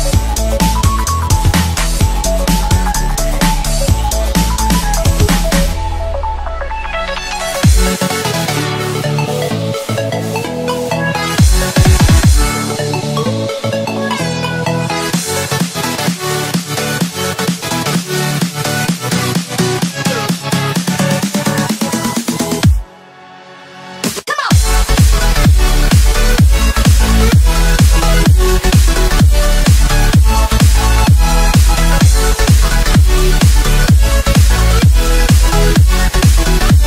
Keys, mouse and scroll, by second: 1.0 s, 8.1 KP_1, 9.4 s, 14.0-14.7 drag, 15.2-17.3 middle drag, 17.3-17.7 scroll down 1, 17.7-20.6 middle drag, 20.6 scroll up 2, 21.6 KP_1, 22.1-22.6 scroll up 3, 23.3 click, 23.6 scroll down 1, 24.2 s, 25.5 click, 27.1 click, 28.3 shift+d, 29.4 s, 31.6 g, 35.5 s.